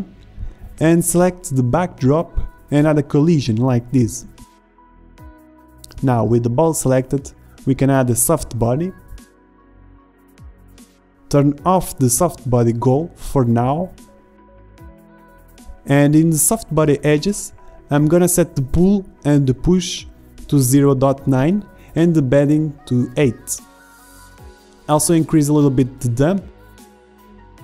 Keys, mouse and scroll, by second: 0.7-7.4 drag, 7.5 click, 7.6 middle drag, 7.9-8.4 drag, 8.6 middle click, 8.7-9.2 middle drag, 11.0-27.3 drag.